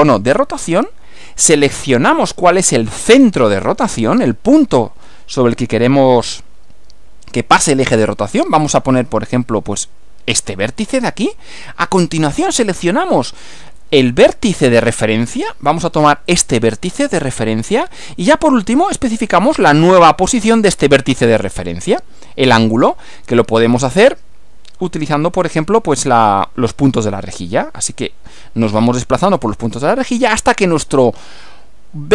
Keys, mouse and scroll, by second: 0.0 click, 10.4 click, 16.3 click.